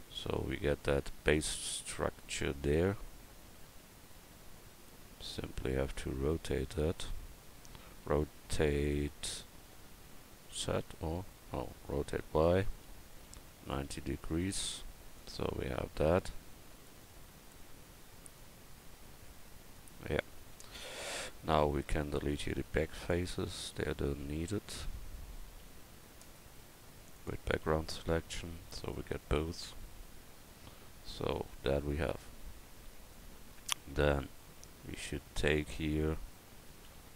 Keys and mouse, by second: 8.1 r, 12.9 r, 15.7 s, 20.5 Tab, 23.1 click, 23.8 a, 24.8 x, 25.5 c, 27.6 c, 29.2 x, 32.9 KP_1, 34.4 a, 36.9 c.